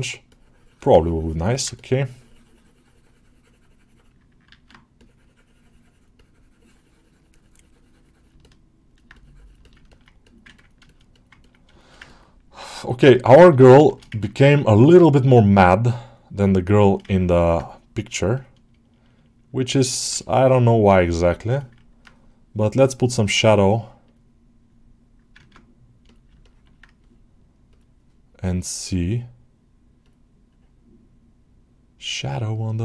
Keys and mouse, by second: 0.1-1.3 drag, 1.4 ctrl+middle click, 1.6-4.0 drag, 4.8 click, 6.1 click, 8.3 middle click, 9.5 alt+middle click, 9.8 ctrl+alt+middle click, 10.1 alt+middle click, 10.4 ctrl+alt+middle click, 10.7 alt+shift+middle click, 11.0 alt+middle click, 11.3 ctrl+middle click, 11.6 alt+shift+middle click, 11.9 ctrl+alt+middle click, 13.8-14.8 ctrl+alt+shift+middle drag, 15.9 click, 16.4 middle click, 16.7 alt+shift+middle click, 17.0 ctrl+alt+middle click, 20.1-21.4 drag, 21.4 ctrl+middle click, 22.8-24.6 drag, 25.5 ctrl+Tab, 26.2 shift+middle drag, 27.7-32.8 drag.